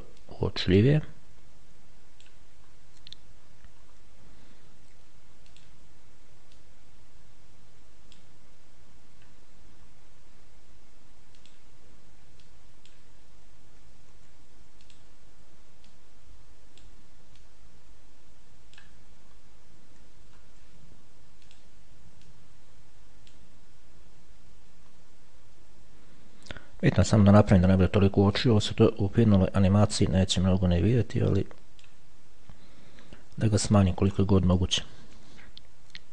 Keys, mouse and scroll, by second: 0.5-3.0 drag, 3.0-4.6 scroll up 1, 4.6 scroll down 1, 5.8 click, 6.8-8.9 drag, 9.5-10.2 scroll down 2, 10.2-10.6 scroll down 1, 11.6 click, 12.7-13.6 drag, 14.4 ctrl+z, 15.1 click, 16.1-17.6 drag, 19.2 click, 19.6-20.1 scroll down 1, 20.5-21.0 shift+scroll down 1, 21.8 click, 22.6-24.1 drag, 25.5-26.6 scroll down 2, 27.2 shift+scroll up 2, 27.4-27.8 shift+scroll down 2, 28.6 click, 30.2-32.6 drag, 34.2 middle click, 35.6-36.1 ctrl+shift+scroll down 3.